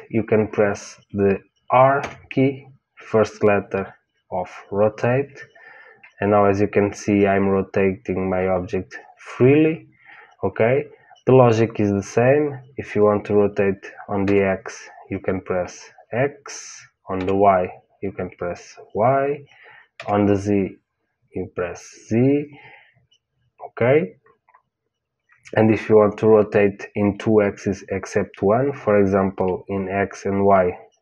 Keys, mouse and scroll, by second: 1.9 r.